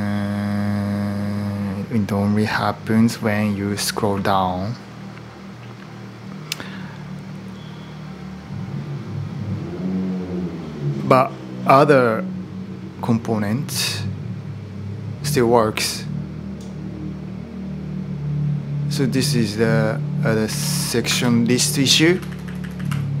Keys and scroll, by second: 20.4-23.2 typing, 20.8 Return.